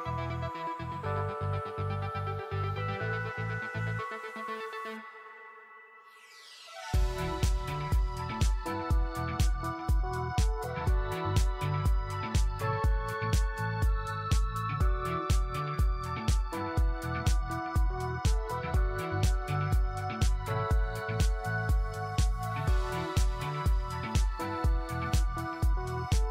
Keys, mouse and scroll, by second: 0.2-1.0 scroll down 1, 1.0-1.6 scroll up 1, 1.6 space, 1.7 scroll up 1, 2.0 alt+click, 2.6 scroll down 1, 2.9 alt+click, 5.0 scroll down 1, 5.3 alt+click, 7.7 1, 8.4 alt+middle click, 10.8 shift+right click, 14.6-15.2 scroll up 1, 16.0 alt+middle click, 16.5 scroll up 1, 17.0 alt+middle click, 17.8 scroll up 1, 18.3 alt+middle click, 22.0 3, 24.0 1, 24.7 scroll up 1, 25.3 alt+middle click, 25.7-26.3 scroll down 1.